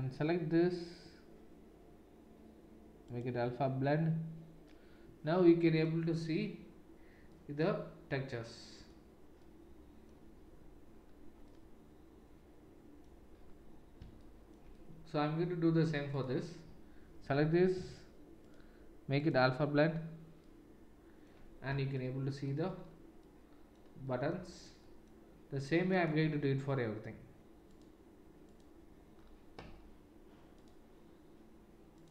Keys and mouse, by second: 0.0-16.2 drag, 16.2-18.6 middle drag, 18.6-26.6 drag, 26.6-27.7 middle drag, 27.7-30.7 drag, 30.7-32.1 middle drag.